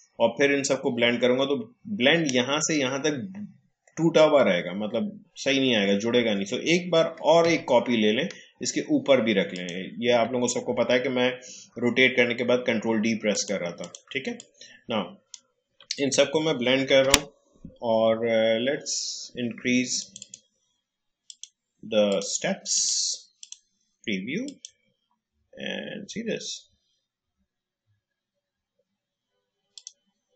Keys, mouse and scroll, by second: 7.4 ctrl+d, 9.5 ctrl+click, 13.3-16.8 drag, 16.8 ctrl+alt+b, 19.9 click, 25.1-25.7 scroll up 1, 29.7 click.